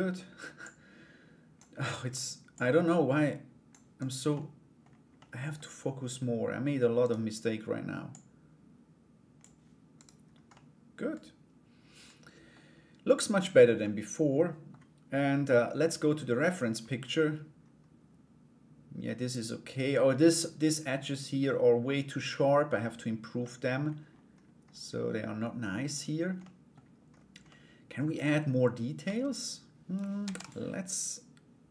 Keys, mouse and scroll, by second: 0.2-1.3 drag, 1.3 middle click, 2.1-3.3 drag, 3.5 right click, 3.9 middle click, 4.7 middle click, 6.6 right click, 7.7-9.0 drag, 9.5 right click, 10.1-12.1 middle drag, 13.4 middle click, 23.0 middle click, 25.5 right click, 26.0 middle click, 27.0 middle click, 28.6 Tab, 29.8 ctrl+r.